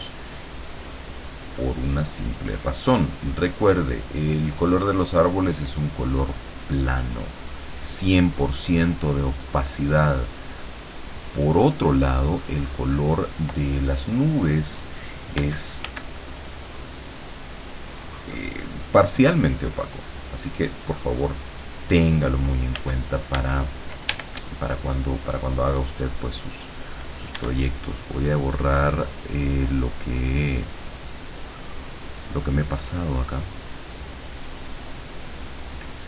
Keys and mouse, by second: 0.3-2.9 drag, 5.7 click, 7.0-9.5 drag, 10.5-11.9 drag, 12.7 click, 15.5 f, 16.2-17.9 drag, 18.3 click, 19.6-22.2 drag, 22.9 f, 23.4 d, 24.2 e, 27.4 e, 28.1-32.5 drag, 32.7-35.0 drag.